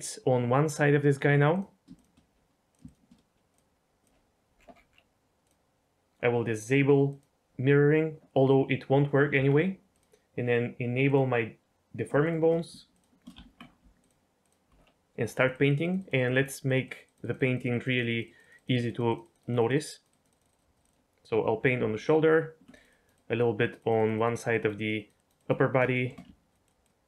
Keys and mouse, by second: 1.9 shift+click, 2.7 drag, 2.8 shift+click, 3.6 click, 5.4-6.0 drag, 7.0 click, 9.3 Tab, 11.0 click, 12.2 shift+click, 13.3 Tab, 14.0 ctrl+click, 14.4 ctrl+click, 15.2 click, 15.5 click, 15.8 click, 15.9 click, 16.4 click, 16.6 click, 16.8 click, 17.0 click, 17.3 click, 17.5 click, 17.7 click, 17.8 click, 18.0 click, 18.3 click, 18.5 click, 18.7 click, 19.0 click, 19.2 click, 19.3 click, 19.5 click, 19.9 click, 20.2 click, 20.7 click, 21.9 ctrl+click, 22.7 click, 22.8 click, 23.6 click, 24.3 click, 24.5 click, 24.7 click, 25.1 click, 25.9 shift+middle click, 26.5 ctrl+click.